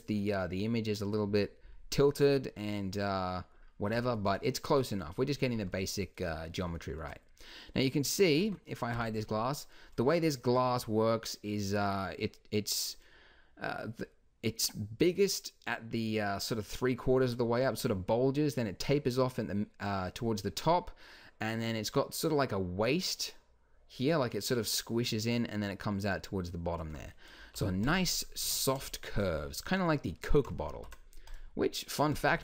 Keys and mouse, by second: 8.4 Tab, 8.9 h, 27.4 alt+h, 28.4 Tab, 30.7 ctrl+r.